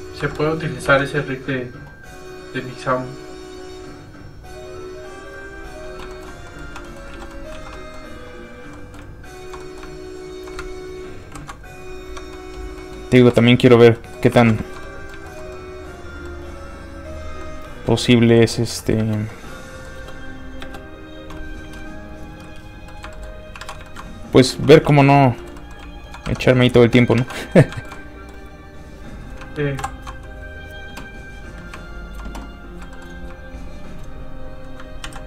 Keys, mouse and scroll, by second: 0.2 middle click, 0.2 i, 0.8 Tab, 5.3 click, 6.1 shift+middle click, 6.5 middle click, 6.6 1, 6.8 middle click, 7.1 alt+z, 7.3 middle click, 7.4 middle click, 7.7 alt+middle click, 7.8 middle click, 8.4 click, 8.7 middle click, 9.3 shift+click, 9.6 middle click, 10.2 shift+click, 11.2 ctrl+shift+p, 11.6 click, 11.7 click, 12.1 Tab, 12.3 middle click, 12.6 scroll down 1, 12.8 middle click, 13.3 space, 13.8 scroll down 1, 13.9 middle click, 14.3 alt+a, 14.6 shift+middle click, 14.8 middle click, 14.9 middle click, 15.3 shift+middle click, 15.5 middle click, 19.0 space, 19.3 middle click, 20.0 space, 22.1 click, 22.9 middle click, 23.1 shift+middle click, 23.5 alt+middle click, 23.6 alt+a, 23.8 shift+middle click, 24.2 middle click, 24.5 alt+shift+z, 25.2 alt+z, 25.4 shift+middle click, 25.6 middle click, 26.0 shift+click, 26.2 shift+Tab, 26.5 middle click, 26.8 shift+middle click, 27.0 alt+middle click, 27.2 alt+a, 27.3 middle click, 27.7 shift+middle click, 27.9 middle click, 28.0 middle click, 28.8 click, 29.8 ctrl+shift+m, 31.5 shift+click, 32.4 middle click, 32.8 shift+middle click, 33.8 shift+click, 35.0 ctrl+shift+z.